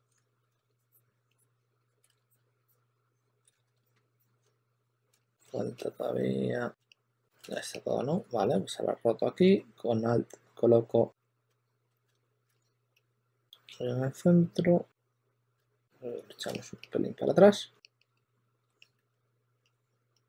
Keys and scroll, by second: 0.1 super+z, 0.2 super+z, 0.3 super+z, 2.0 super+z, 3.4 super+z, 5.0 super+z, 7.3 super+z, 12.0 super+z, 12.4 super+z, 15.5 super+z, 16.0 q, 16.4 super+a, 17.5 q, 18.6-19.5 typing.